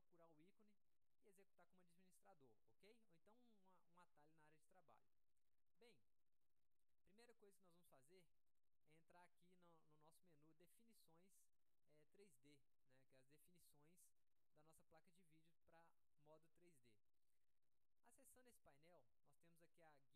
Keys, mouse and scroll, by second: 8.5 click.